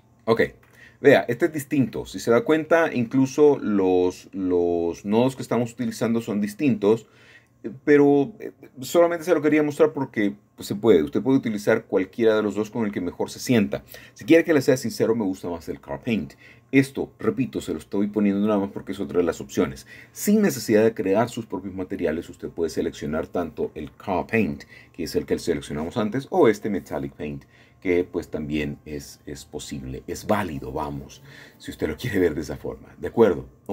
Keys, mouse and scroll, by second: 2.1 middle drag, 3.3 middle click, 5.3 middle click, 7.0 scroll up 5, 7.7 middle click, 8.2-9.0 scroll up 2, 11.7 click, 14.3-21.7 drag, 25.3 scroll down 1, 25.4-26.2 scroll up 6, 26.2-28.2 shift+middle drag, 29.5-30.6 drag, 30.7 click.